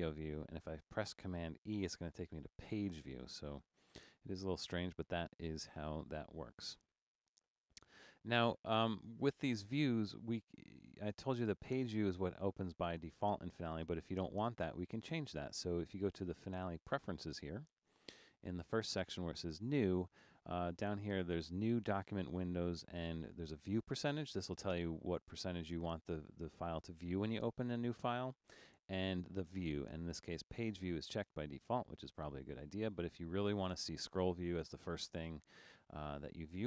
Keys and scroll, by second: 2.0 super+e.